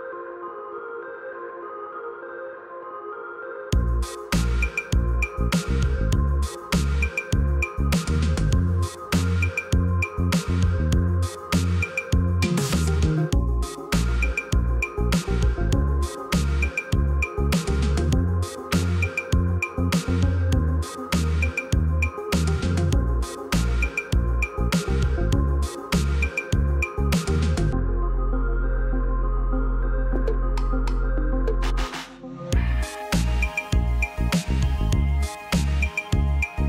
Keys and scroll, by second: 11.1 \, 12.7 p, 13.9-14.8 typing, 18.1 \, 22.8 F2, 27.4 l, 30.5-31.0 typing, 32.5 typing, 34.2 Escape.